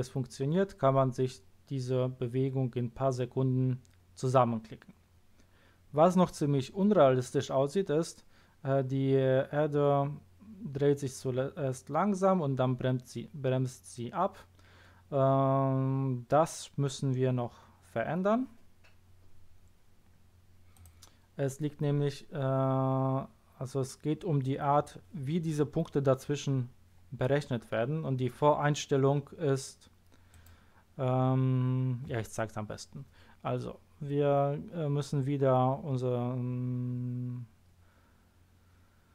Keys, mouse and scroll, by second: 20.7 click, 30.3 click.